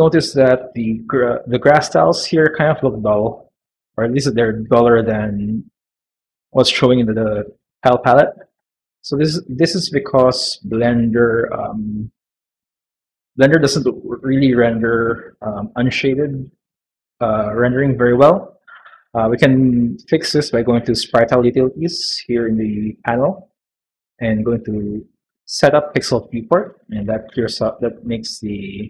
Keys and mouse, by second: 9.2 click, 11.1 middle click, 11.7 shift+middle click, 15.4 middle click, 21.8-22.8 drag, 23.4-26.5 drag, 28.0 middle click.